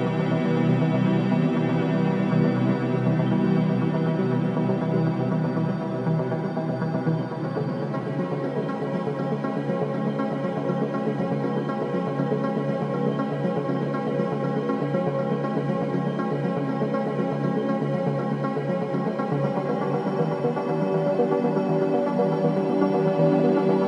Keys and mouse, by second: 0.9 click, 1.9 click, 2.7 g, 3.1 click, 6.2 i, 7.2-8.2 drag, 9.3-10.6 drag, 10.7 click, 12.0 i, 13.2 click, 14.0 space, 15.1 space, 15.4 click, 15.7 space, 16.6 space, 18.0 click, 20.2-22.1 ctrl+alt+drag, 22.4 click, 23.5 ctrl+alt+click.